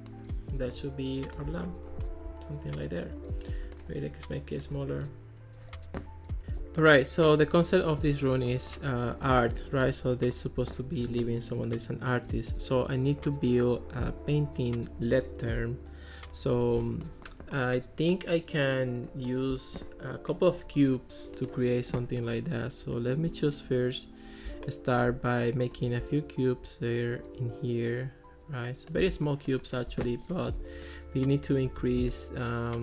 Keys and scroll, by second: 31.9 super+z.